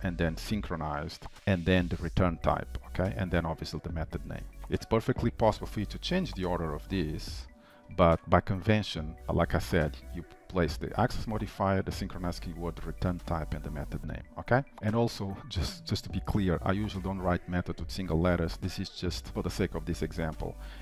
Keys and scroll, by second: 1.6 ctrl+shift+Left, 5.2 ctrl+shift+Left, 5.9 ctrl+x, 7.8 Delete, 9.2 ctrl+z, 10.5 ctrl+z, 14.7 ctrl+s, 16.8 ctrl+shift+Left.